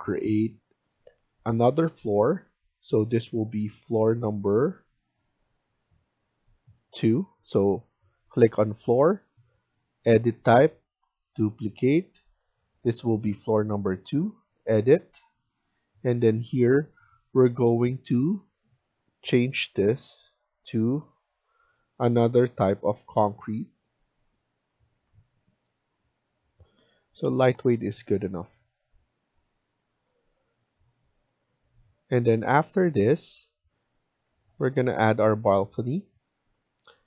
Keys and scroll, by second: 34.2 F1.